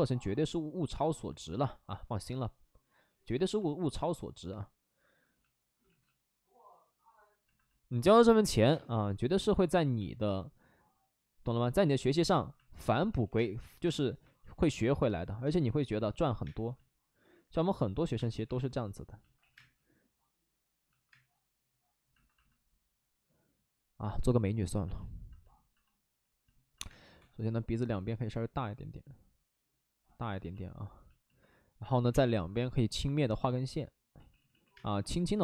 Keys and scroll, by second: 0.9 space, 5.7 ctrl+z, 8.5 1, 8.6 space, 9.9 ctrl+z, 13.0 ctrl+z, 13.3-16.4 typing, 14.3 ctrl+z, 18.1 space, 18.4 3, 19.3 ctrl+z, 19.4 space, 21.0 space, 26.8 space, 27.1 1, 31.9 5, 32.0 space, 34.1 ctrl+z, 34.3 ctrl+z, 34.6 ctrl+z, 34.7 space, 35.2 space, 35.3 space.